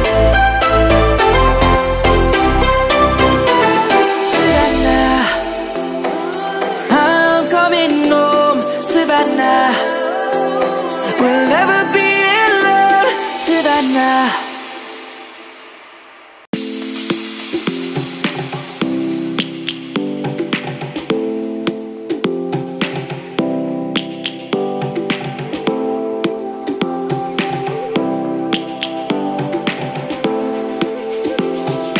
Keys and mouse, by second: 0.7 shift+click, 0.9 shift+click, 1.8 shift+click, 1.9 shift+click, 2.8 shift+click, 3.4 shift+click, 3.6 shift+click, 4.2 shift+click, 5.8 click, 9.3 shift+click, 10.4 shift+click, 11.2 click, 12.6 click, 16.8 click, 18.9 ctrl+z, 20.3 Tab, 20.8 click, 27.5 click, 29.7 Tab, 31.1 middle click.